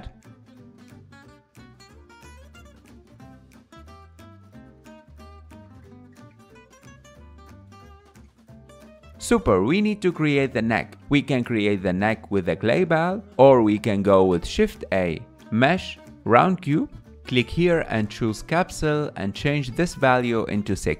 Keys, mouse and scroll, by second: 0.4 alt+z, 0.4 shift+middle click, 0.5-2.0 drag, 1.9 f, 2.1-3.9 drag, 3.9 scroll up 3, 4.0 click, 4.6 f, 4.7 click, 5.2 shift+middle click, 5.3 click, 5.6 scroll up 4, 5.7 click, 5.8 alt+z, 5.9 shift+middle click, 6.0 click, 6.1-7.1 scroll down 3, 7.1 ctrl+Tab, 8.2 ctrl+Tab, 8.6-9.0 scroll down 4, 9.0 click, 10.4-12.4 scroll down 2, 18.8-20.9 drag.